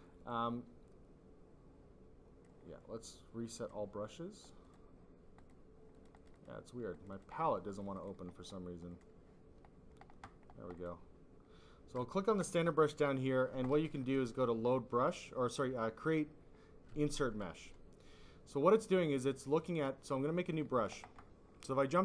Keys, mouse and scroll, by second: 0.2 click, 3.5 click, 3.6 click, 4.6 click, 5.3 click, 5.4 click, 5.9 click, 6.5 double click, 6.9 click, 7.1 double click, 7.6 double click, 7.9 double click, 8.8 double click, 10.7 click, 18.7 click, 18.9 click, 20.4 click.